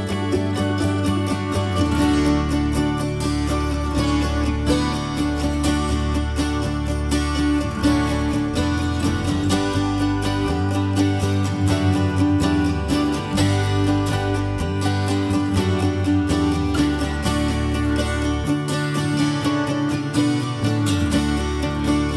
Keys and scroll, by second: 10.8 ctrl+g, 10.9 ctrl+s, 19.9 ctrl+s, 21.6 ctrl+c.